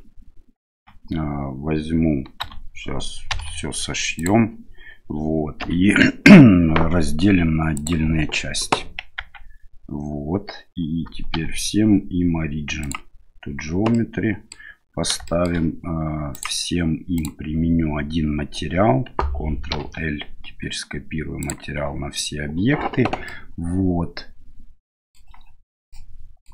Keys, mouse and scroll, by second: 0.7 Tab, 2.4 a, 3.3 m, 5.6 p, 9.2 Tab, 11.3 w, 14.0-14.6 middle drag, 15.3 shift+middle click, 16.3 click, 17.2 click, 19.7 ctrl+l, 23.4-25.2 middle drag, 25.9 shift+middle click.